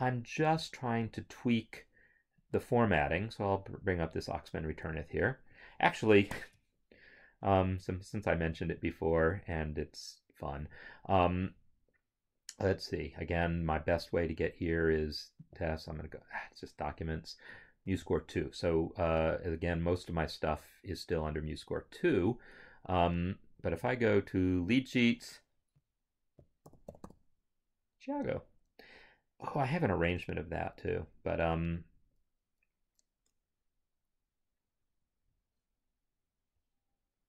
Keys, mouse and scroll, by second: 0.4 click, 2.8 click, 4.9 Home, 6.3 ctrl+o, 13.2 click, 15.5 click, 18.0 click, 26.7 t, 26.9 h, 27.0 i, 34.8 Return.